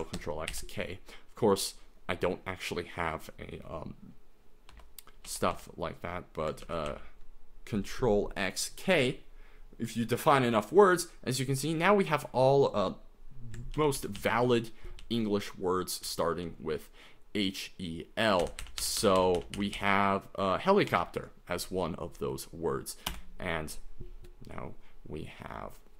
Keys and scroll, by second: 0.2 ctrl+x, 0.5 ctrl+k, 4.7-6.0 typing, 6.7 ctrl+x, 6.9 ctrl+k, 13.8 ctrl+n, 14.2 ctrl+n, 14.4 ctrl+n, 15.0 ctrl+n, 15.2 ctrl+n, 15.7 ctrl+n, 16.1-16.4 ctrl+n, 18.4 ctrl+n, 18.6 ctrl+n, 18.8 ctrl+n, 19.0 ctrl+n, 19.2 ctrl+n, 19.3 ctrl+n, 19.7 ctrl+n, 20.9 ctrl+p, 23.1 Return.